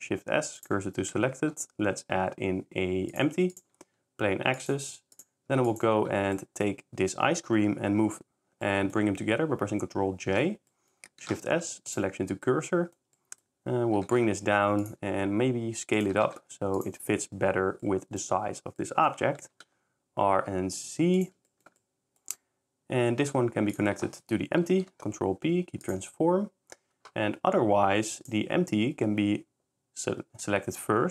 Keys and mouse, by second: 3.9 shift+s, 5.5 s, 6.3 click, 10.2 ctrl+j, 14.0 shift+g, 14.2 z, 15.0 s, 16.1 g, 16.3 z, 19.5 r, 19.6 z, 21.4 s, 21.5 drag, 23.3 s, 24.8 ctrl+p, 28.1 click.